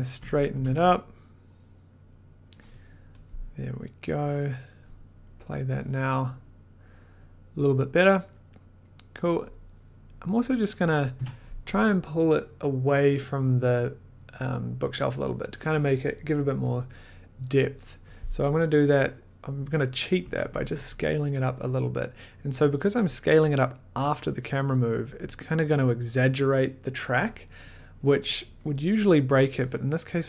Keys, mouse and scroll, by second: 0.1 Up, 0.5 Down, 0.7 Down, 3.2 click, 4.1 click, 5.4 click, 9.2 click, 9.5 click, 10.6 click, 11.1 t, 19.9 click, 20.2 Left, 20.7 Up, 23.6 click, 29.4 click.